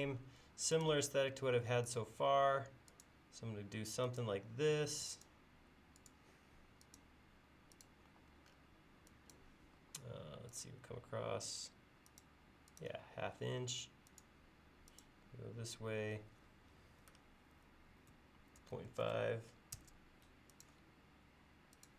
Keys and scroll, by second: 8.1 e, 9.8 l, 18.4-19.5 typing.